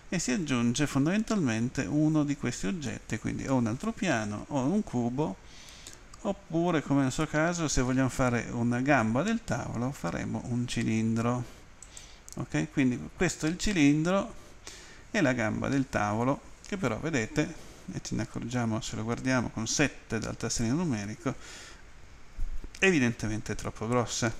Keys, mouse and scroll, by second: 11.8 click, 19.8 Home.